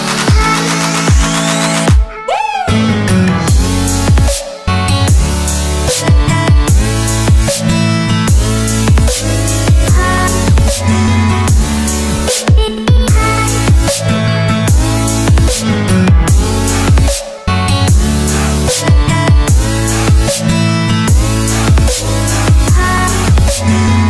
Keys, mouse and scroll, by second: 4.6 alt+scroll up 1, 5.5 alt+scroll up 1, 7.0-7.3 scroll down 1, 8.6 click, 12.5 click, 22.4 click.